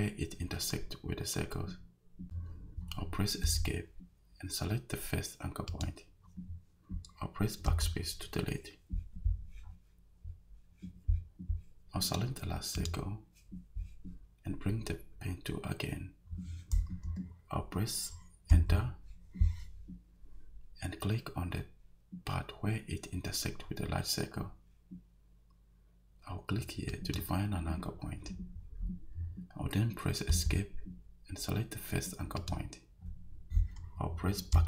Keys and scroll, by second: 3.4 Escape, 7.7 BackSpace, 18.5 Return, 30.3 Escape, 34.5 BackSpace.